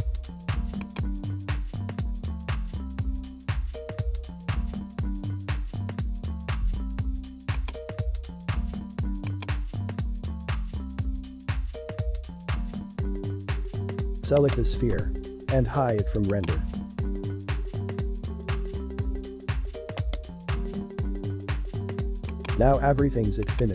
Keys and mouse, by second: 5.1 click, 7.5 click, 9.1 click, 12.5 ctrl+i, 13.2 h, 14.3 right click, 16.3 click, 18.8 alt+h, 20.0 right click, 22.3-23.6 drag.